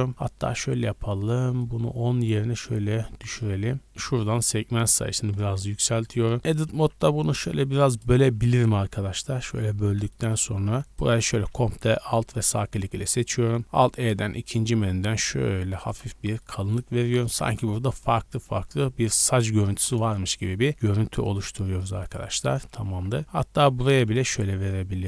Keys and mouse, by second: 6.4 Tab, 6.7 ctrl+r, 8.8 3, 9.2 click, 10.3-11.3 drag, 10.8 alt+middle click, 10.8 alt+right click, 11.8 middle click, 13.6 alt+e, 13.6 alt+click, 14.5-15.8 shift+drag, 15.8 shift+middle click, 16.1 Tab, 16.8 a, 17.0 a, 17.2 shift+click, 17.3 shift+middle click, 17.8 Tab, 18.5 shift+middle click, 19.0 a, 19.2 a, 19.5 alt+click, 20.6 alt+e, 22.7 a, 22.9 a, 23.7 alt+e.